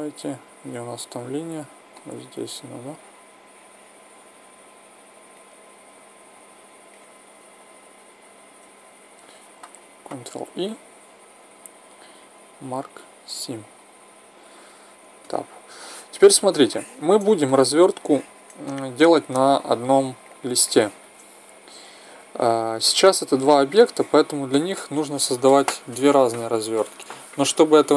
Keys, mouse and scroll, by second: 1.8-4.6 middle drag, 4.7 middle click, 5.8-7.7 middle drag, 8.0-9.8 right drag, 10.1 ctrl+e, 15.2 Tab, 20.2-21.0 right drag, 21.7-22.9 middle drag, 22.9 click, 23.8 middle drag, 24.0-26.9 drag.